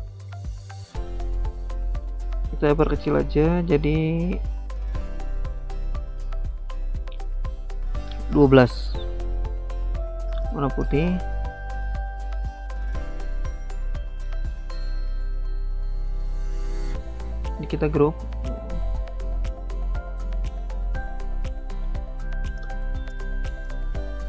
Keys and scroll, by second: 0.4 ctrl+c, 1.0 ctrl+v, 17.5 ctrl+g.